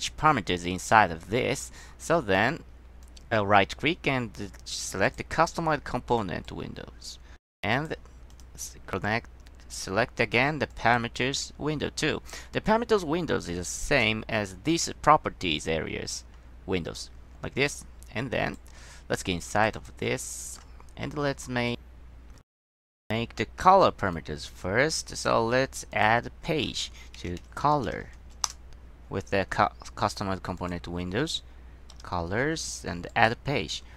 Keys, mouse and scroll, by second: 3.2 drag, 5.2 click, 6.6-8.0 drag, 8.4 click, 10.8 click, 13.0 click, 13.9 click, 17.1-18.7 drag, 19.3 click, 19.9 click, 20.4 click, 20.9 middle click, 26.1 click, 27.3-28.5 typing, 28.6 Return, 30.7 click, 33.2 click.